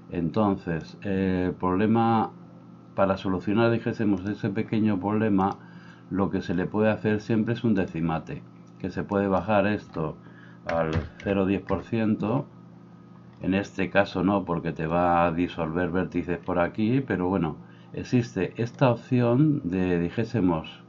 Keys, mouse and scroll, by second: 4.3-5.5 middle drag, 5.5-20.8 drag.